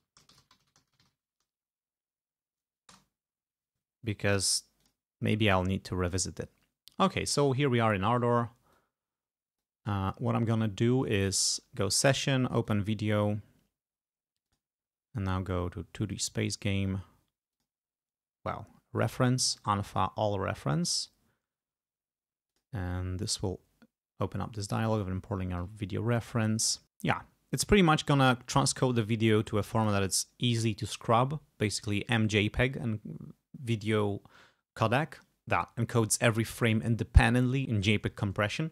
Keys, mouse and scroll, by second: 0.0-1.6 typing, 3.0 Return, 4.9-6.1 drag, 9.0-10.0 drag, 11.4 click, 12.7 click, 14.5 click, 16.2 click, 17.6 click, 19.1 click, 19.5 click, 22.6 click, 29.8 click.